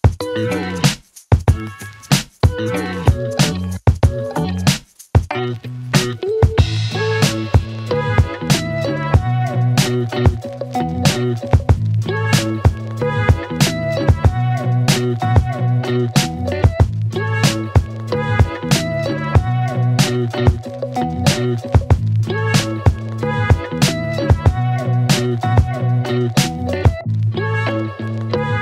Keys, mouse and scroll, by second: 0.3 click, 1.4 right click, 3.2 click, 4.7-5.7 typing, 6.3 click, 7.9 click, 9.4 click, 9.8-11.3 typing, 11.9-12.6 click, 15.8 click, 18.7 click, 20.4 click, 21.9 click, 22.8 Return, 24.7 click, 26.2 Return, 28.1-28.6 click.